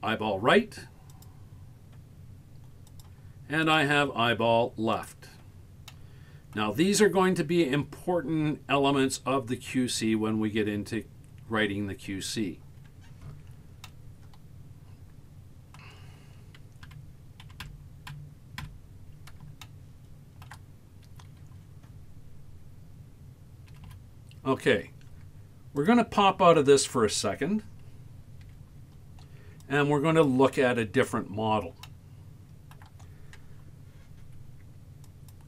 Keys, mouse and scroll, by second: 1.2 click, 2.9 click, 3.7 click, 5.0 click, 5.9 middle click, 13.3-13.8 scroll up 3, 13.8-15.8 middle drag, 15.9-16.9 scroll down 10, 16.9 Tab, 17.5 Tab, 17.8 Tab, 18.2 Tab, 18.6 Tab, 19.6-20.5 shift+middle drag, 23.7 a, 23.9 a, 25.8-26.9 drag, 28.5 z, 31.2-31.6 scroll up 1, 31.8-32.8 shift+middle drag.